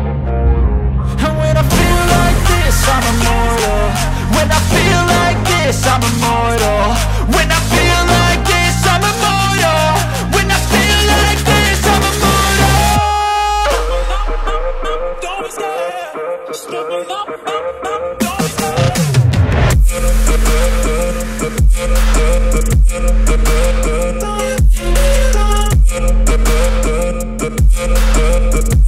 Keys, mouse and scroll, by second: 2.9 5, 5.6 5, 8.8 click, 10.9 click, 11.4 right click, 13.7 click, 16.3 right click, 17.6 click, 26.2 5.